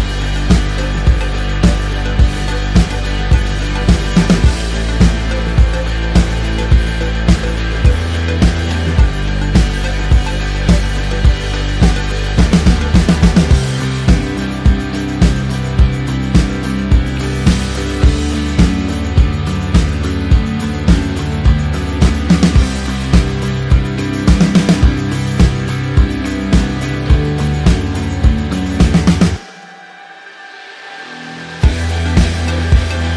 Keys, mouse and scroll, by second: 2.3 t, 3.1 Return, 4.3 ctrl+click, 5.1 t, 5.8 alt+click, 7.9 KP_Enter, 8.5 click, 9.7 alt+click, 17.6 ctrl+click, 18.2 ctrl+t, 18.8 click, 20.8 KP_Enter, 26.3-26.7 scroll up 1, 27.0 click, 27.4 ctrl+g, 28.3 click, 28.6-32.6 typing, 32.6 Return.